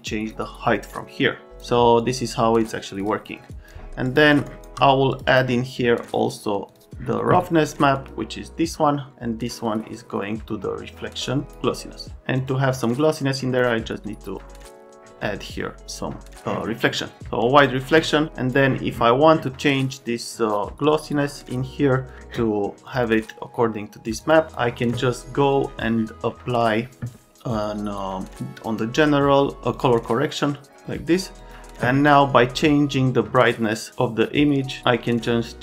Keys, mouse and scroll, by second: 0.1 click, 1.5 click, 2.0 click, 3.0 click, 3.5 click, 4.0 click, 4.5 shift+click, 5.1 click, 5.3 click, 6.7 click, 7.8 click, 7.9 click, 9.6 click, 12.4 click, 13.4 click, 15.9 click, 18.3 click, 22.1 click, 22.9 click, 23.0 click, 24.0 click, 24.2 click, 24.5 click, 31.4 click, 33.3 click.